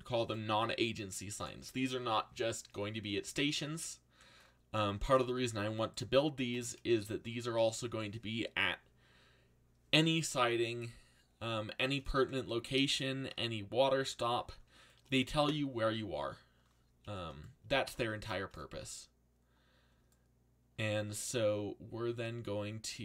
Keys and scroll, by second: 3.1 a, 12.6 z.